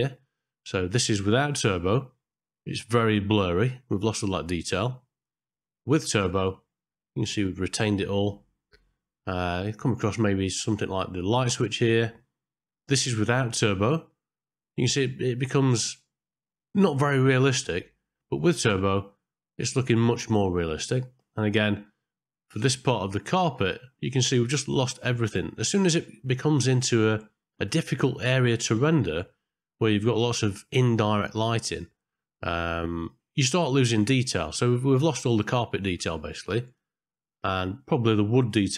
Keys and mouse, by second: 6.5 click, 8.4 middle click, 11.0 middle click, 12.8 click, 18.5 click, 21.0 middle click, 23.2 click, 25.6 middle click, 37.2 middle click.